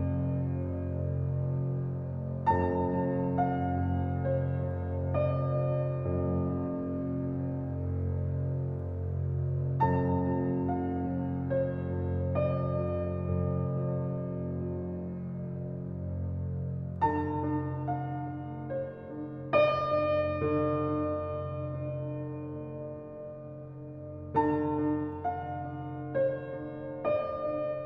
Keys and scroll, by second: 1.0 p, 6.8-8.1 typing, 11.9 h, 12.7 a, 13.1 n, 13.6 l, 14.2 Return, 14.9 typing, 17.8 shift+a, 21.9-22.6 typing.